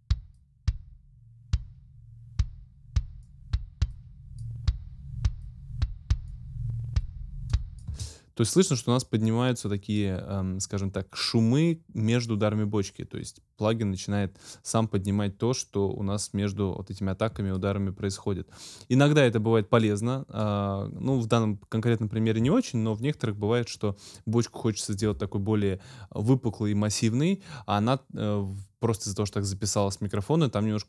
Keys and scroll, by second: 7.9 space.